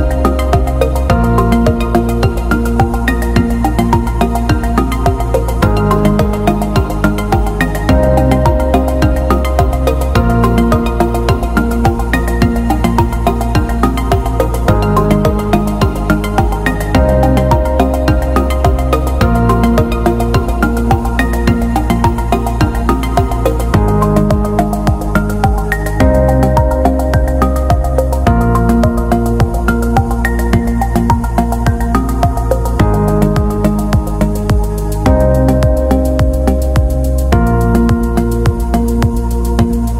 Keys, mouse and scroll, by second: 0.1 click, 1.2 Delete, 2.5 click, 8.4-8.9 scroll up 1, 9.4 click, 12.2-12.6 scroll up 1, 12.9 click, 15.6 click, 17.2 click, 19.1-20.9 typing, 21.4 Return, 23.4 click, 26.4 scroll down 1, 29.6 click, 35.8 click, 39.3 click.